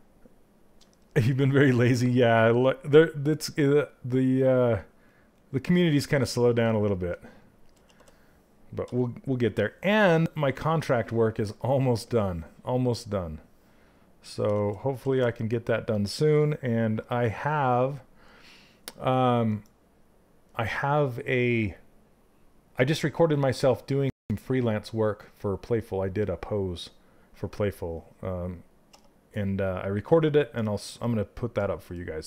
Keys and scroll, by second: 6.1 shift+z, 7.3 shift+z, 14.0 shift+z, 14.6 shift+z.